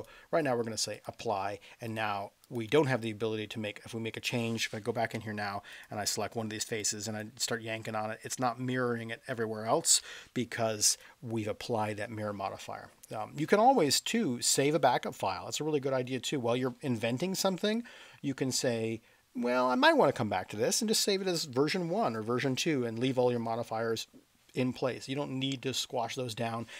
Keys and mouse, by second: 0.0-1.0 drag, 5.1 Tab, 6.8-7.2 drag, 7.9-9.1 middle drag, 10.0 ctrl+z, 10.9 click, 25.7 middle click.